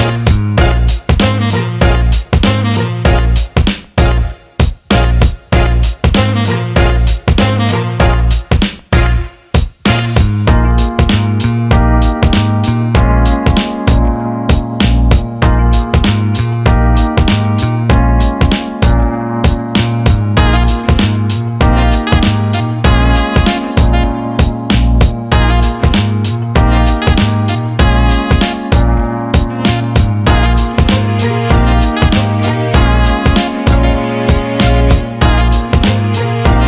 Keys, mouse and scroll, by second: 12.9 alt+middle click, 13.4 alt+middle click, 14.8-15.8 drag, 15.8 Tab, 17.7 click, 18.6-20.0 drag, 20.2-21.2 alt+middle drag, 22.0 click, 22.7 alt+middle click, 23.3 Tab, 25.8 click, 27.7 click, 28.6 alt+middle click, 29.1-32.3 drag, 32.6 alt+middle click, 33.0 click, 33.2 alt+middle click, 34.5 alt+shift+middle click, 34.9 alt+middle click, 35.1 click, 35.8 Tab.